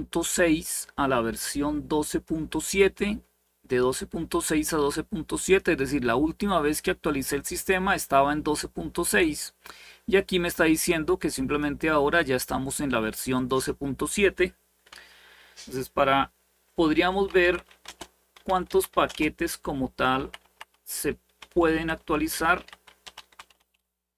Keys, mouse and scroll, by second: 0.0-2.0 drag, 5.1 click, 10.2-11.4 drag, 13.1 click, 16.8-23.8 typing.